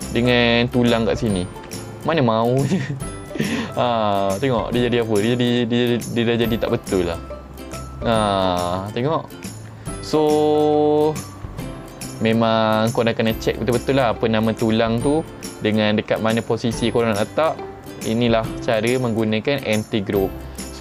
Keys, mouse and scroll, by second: 0.2 click, 1.7 r, 5.9 middle click, 6.5 r, 8.8 right click, 12.8 middle click, 20.5 ctrl+Tab.